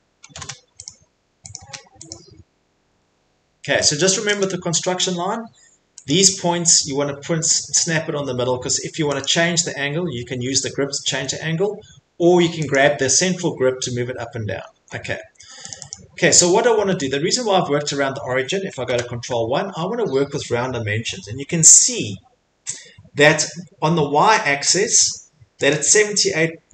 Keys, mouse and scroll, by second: 0.3 s, 0.8 click, 1.5 click, 2.1 click, 2.9 Escape, 3.9 click, 4.4 click, 4.8 middle click, 4.9 middle click, 6.1 click, 7.6 click, 9.2 click, 11.1 Escape, 12.7 click, 13.2 scroll, 14.0 scroll, 14.7 Escape, 14.9 middle click, 15.0 middle click, 15.4 Escape, 15.7 click, 16.0 click, 16.5 middle click, 18.9 ctrl+1, 25.7 click.